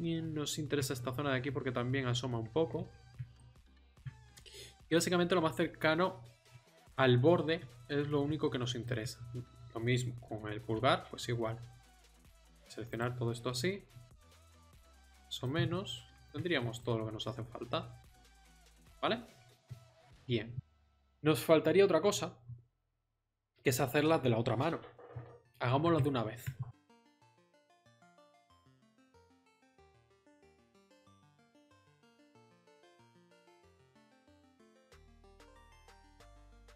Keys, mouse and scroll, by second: 1.0 z, 2.7 z, 3.4 z, 7.5 z, 10.2 z, 10.7 c, 18.8 middle click, 25.8 KP_1, 27.0 z, 28.2 KP_7, 29.0 click, 29.5 z, 30.2 ctrl+z, 30.8-33.7 typing, 32.2 middle click, 35.0 ctrl+z, 35.3 ctrl+z, 35.6 ctrl+z, 36.2 ctrl+z.